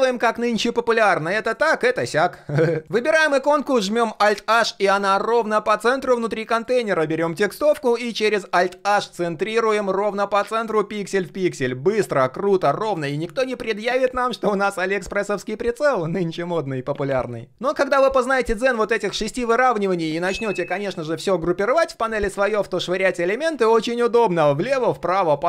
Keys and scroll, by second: 4.1 alt+h, 7.5 alt+h, 23.8 alt+a, 24.6 alt+d, 25.3 alt+h.